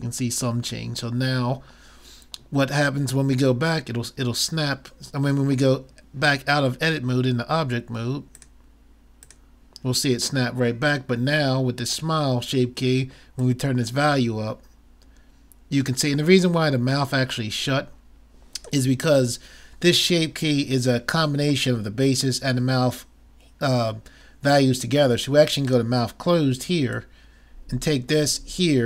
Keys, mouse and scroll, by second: 9.3 click, 13.4-15.2 drag, 25.7-28.8 drag.